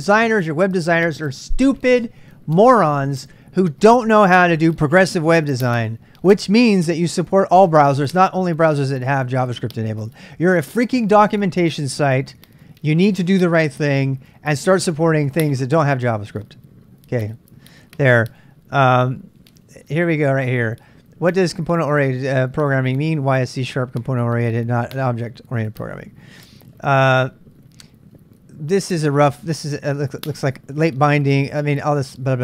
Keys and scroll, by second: 31.7 j.